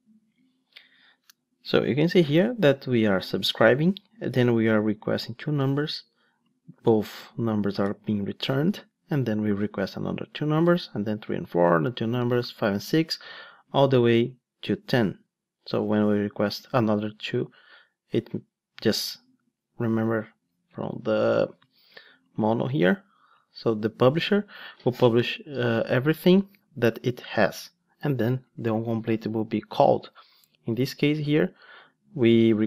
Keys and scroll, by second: 30.1 ctrl+Tab.